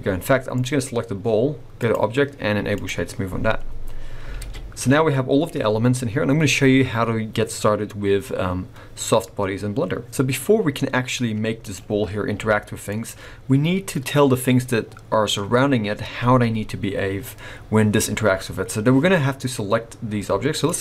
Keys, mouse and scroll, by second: 0.1-1.7 scroll up 4, 0.5 click, 1.7 click, 2.8-3.3 scroll up 3, 3.4 scroll down 3, 4.3 alt+a, 10.1 alt+a, 10.1 middle click, 11.6 click, 14.6 g, 20.6 click.